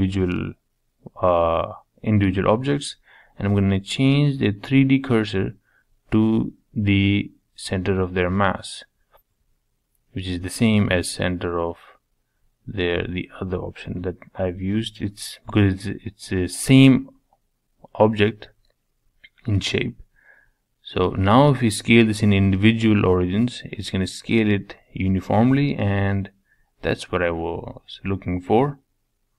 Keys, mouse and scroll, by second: 2.2 click, 2.6-4.4 right drag, 4.5 click, 4.8-6.3 right drag, 6.3 click, 6.6-9.9 right drag, 9.9-11.2 middle drag, 11.2 click, 11.8-12.2 drag, 12.5 click, 12.8-13.8 middle drag, 13.8 shift+click, 14.2 shift+click, 14.6-16.9 shift+drag, 16.9 middle click, 17.4 scroll down 1, 17.6-18.9 middle drag, 18.9 s, 21.6 middle click, 22.6 g, 24.8-26.7 middle drag.